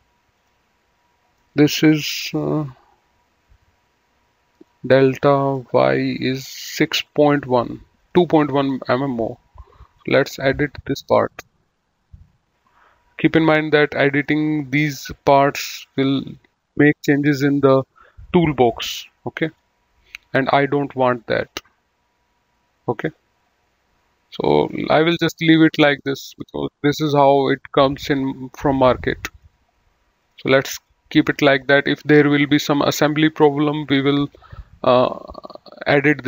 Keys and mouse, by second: 0.4 click, 1.2 middle click, 7.2 right click, 7.9 click, 9.8 click, 11.7 click, 13.2 click, 14.1 middle click, 15.8 click, 19.4 click, 21.5 click, 24.6 click, 25.9 click, 29.4 right click, 30.1 click, 33.9 click, 34.8 right click, 35.3 click.